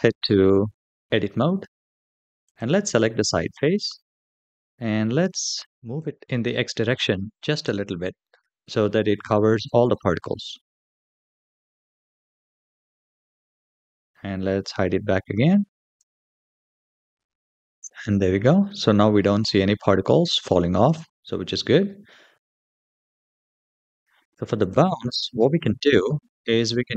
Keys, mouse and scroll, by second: 0.4 Tab, 2.2 click, 3.7 KP_1, 4.9-5.2 scroll up 3, 6.2 g, 10.3-10.8 scroll down 3, 10.8 Tab, 11.2-11.8 middle drag, 12.3-12.7 shift+middle drag, 12.9-13.3 scroll down 2, 13.4 shift+middle click, 15.3 click, 16.6 space, 18.0-19.0 middle drag, 19.4-20.0 shift+middle drag, 22.3 click, 24.4 click, 25.4 shift+middle drag, 25.8-26.1 middle drag, 26.5 shift+middle drag.